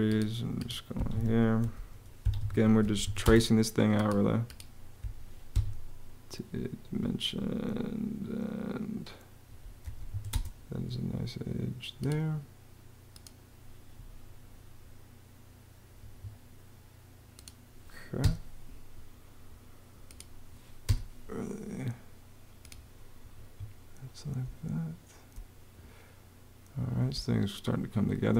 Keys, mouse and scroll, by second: 0.7 Escape, 1.4-3.3 typing, 5.3 Escape, 9.6 m, 9.9 a, 10.1 space, 15.8 Escape, 18.0 BackSpace, 20.6 BackSpace, 23.1 Escape, 24.3 space, 26.9 space.